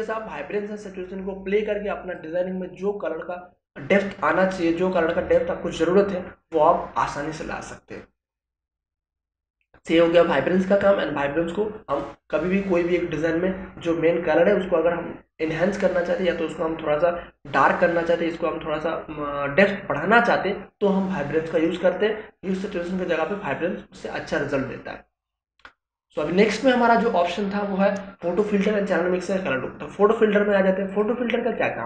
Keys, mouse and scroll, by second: 21.6 click, 26.6 click, 30.9 click.